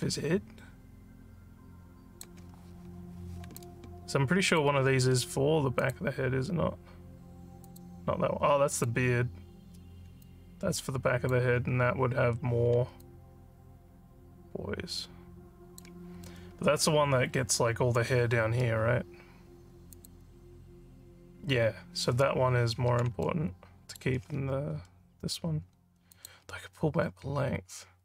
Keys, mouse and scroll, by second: 3.6-4.6 alt+drag, 5.8 click, 7.7 click, 8.7 click, 10.2-11.3 alt+drag, 13.0-15.8 alt+drag, 16.2 alt+middle click, 20.0 click, 23.2 alt+middle click, 26.1 click.